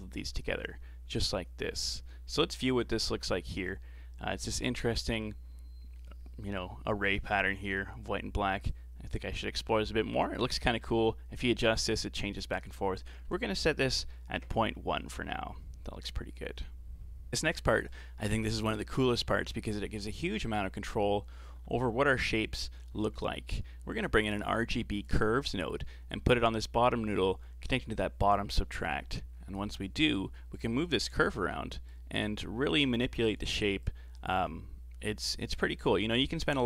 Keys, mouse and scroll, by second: 0.4-2.6 middle drag, 2.6 ctrl+shift+click, 8.7-11.7 drag, 12.9-16.0 drag, 17.3-17.6 scroll down 2, 17.6 shift+a, 29.3-30.6 scroll up 4, 30.6-36.6 drag.